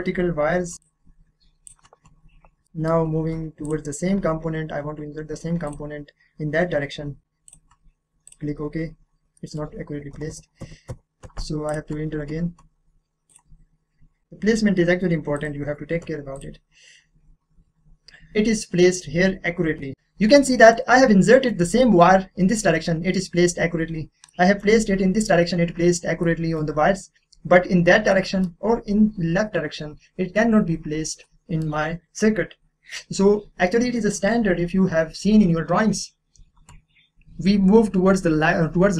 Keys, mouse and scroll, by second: 0.7 click, 2.2-2.6 scroll up 1, 2.6 middle click, 3.2-3.6 scroll down 1, 3.6 click, 5.7 click, 6.2-7.4 scroll up 1, 9.3 middle click, 9.5 scroll up 1, 10.1 ctrl+z, 11.7 click, 13.3 click, 13.7-14.8 scroll up 1, 15.3 click, 16.9 click, 17.5 scroll up 1, 19.0-19.5 scroll down 1, 20.3 middle click, 20.4 middle click, 21.3-21.6 scroll down 1, 23.1-23.5 scroll up 1, 23.5-24.3 scroll down 1, 24.3-26.2 middle drag, 26.2-28.1 middle drag, 28.1-31.1 middle drag, 31.2 middle click, 31.8-33.0 scroll down 1.